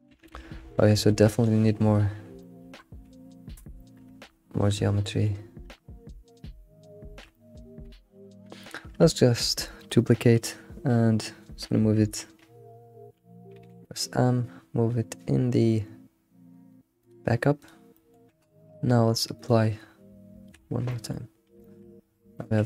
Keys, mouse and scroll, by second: 0.1 ctrl+z, 0.3 ctrl+z, 2.4-3.5 shift+middle drag, 3.5 scroll down 1, 3.8 shift+middle click, 4.0 Tab, 5.0-8.1 shift+middle drag, 8.3 middle click, 8.5 scroll down 1, 8.6 middle click, 9.2 shift+d, 17.7 click, 17.9-19.5 middle drag, 19.5-20.3 drag, 20.3 ctrl+a, 20.9 alt+middle click, 21.6 shift+middle click, 21.9 scroll up 4, 22.3 shift+middle click.